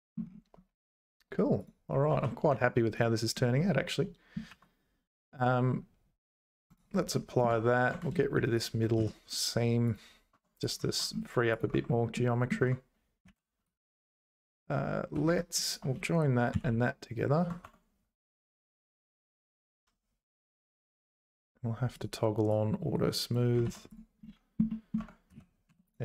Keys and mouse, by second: 1.6 click, 2.1 ctrl+s, 2.5 Tab, 2.9 click, 4.5 ctrl+a, 7.1 middle click, 7.5 Tab, 8.6 click, 9.0 x, 10.3 Tab, 10.9 ctrl+s, 11.7 Tab, 12.1 middle click, 12.6 Tab, 13.3 ctrl+a, 16.5 ctrl+j, 17.6 Tab, 18.9 Tab, 21.1 click, 21.9 click, 22.6 click, 23.6 ctrl+s, 24.7 middle click, 25.0 Tab, 25.3 z, 25.7 3, 25.9 click.